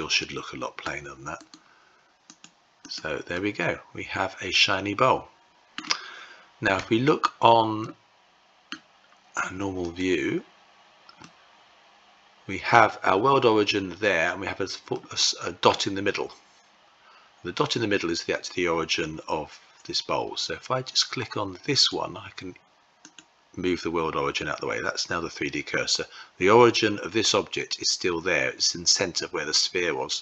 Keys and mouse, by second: 1.0-2.0 right drag, 2.9-5.4 middle drag, 6.4 Tab, 7.4 middle click, 9.6 click, 10.8-12.3 middle drag, 14.5 middle click, 21.3 click, 22.7 click.